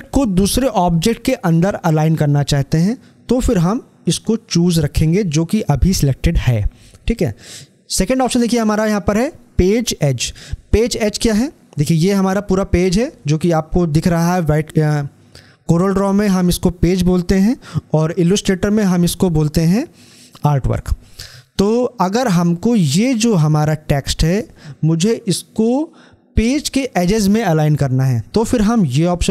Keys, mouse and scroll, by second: 11.1 scroll down 1, 28.9 click.